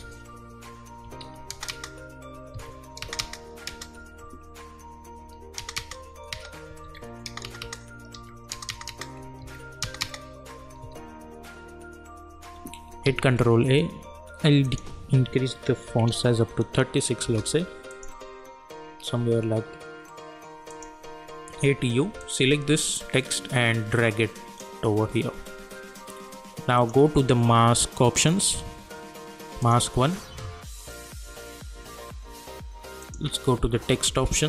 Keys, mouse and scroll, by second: 1.2 ctrl+v, 1.5 space, 2.5 ctrl+v, 3.0 space, 5.2 ctrl+v, 5.6 space, 6.8 ctrl+v, 7.2 space, 8.1 v, 8.5 space, 9.4 ctrl+v, 9.8 space, 10.8 ctrl+v, 13.0 ctrl+a, 14.6 click, 17.2 Return, 17.9 click, 20.7 click, 21.5 u, 22.2-26.7 drag, 31.3 scroll down 1, 33.0 click.